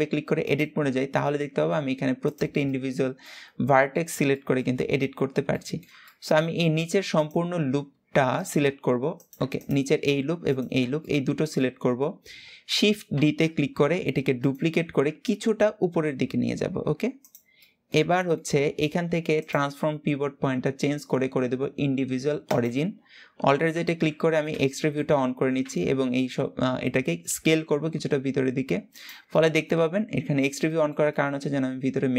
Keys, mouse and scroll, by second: 0.1 click, 0.9-1.9 middle drag, 1.9 click, 2.3-4.5 middle drag, 4.5-5.3 scroll up 1, 5.3 middle click, 6.1-6.8 scroll up 1, 6.8 alt+shift+click, 8.0 alt+shift+click, 8.9 click, 9.3 alt+shift+click, 10.1 alt+shift+click, 10.7-12.8 middle drag, 12.8 shift+d, 14.5 g, 17.3-19.1 middle drag, 19.1-22.1 drag, 23.4 alt+z, 24.4 shift+middle click, 25.3 s, 29.0-32.1 middle drag.